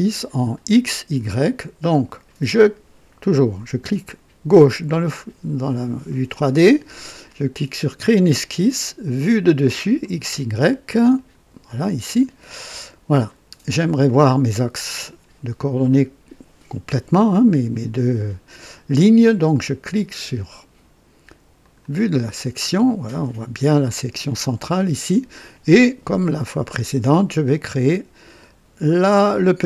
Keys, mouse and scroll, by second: 4.4 click, 7.9 click, 9.9 click, 11.1 click, 12.0 click, 13.2 scroll up 2, 13.7 right click, 21.6 click, 22.5-22.9 scroll up 2, 23.2 right click.